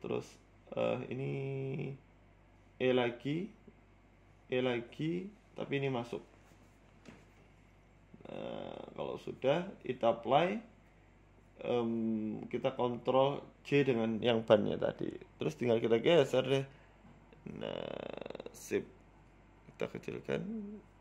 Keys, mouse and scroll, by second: 0.4 middle click, 0.9 shift+middle click, 1.6 KP_Decimal, 3.3 w, 3.7 e, 3.9 s, 5.7 e, 6.5 s, 7.4 g, 9.2 Tab, 9.3-10.3 scroll down 7, 9.6 middle click, 10.1 shift+middle click, 10.7 KP_1, 11.0 KP_3, 11.8 click, 12.2 click, 14.3 shift+right click, 15.0 ctrl+j, 15.6 Tab, 16.5 click, 17.2 g, 20.4 s.